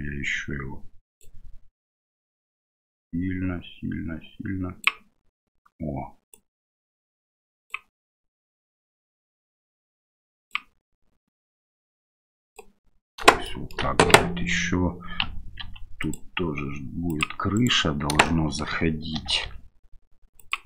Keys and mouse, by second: 2.0-4.8 drag, 6.3-7.7 drag, 8.6-10.5 drag, 11.6 click, 13.5 shift+middle click, 14.3 Tab, 15.6 ctrl+r, 17.6 click, 18.2 right click, 18.3 middle click, 19.2 e.